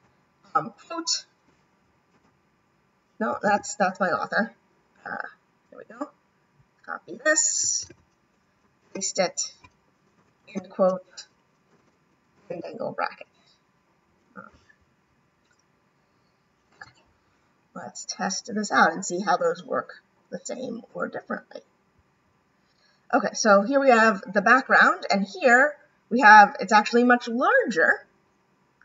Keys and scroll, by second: 12.3 shift+..